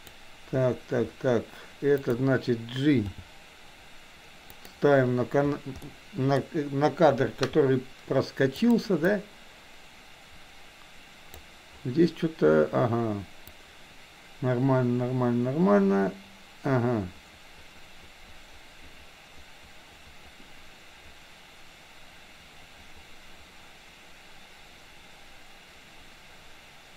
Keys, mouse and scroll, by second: 3.0 g, 5.9 middle click, 8.7 click, 9.0-11.4 drag, 13.5-26.9 drag.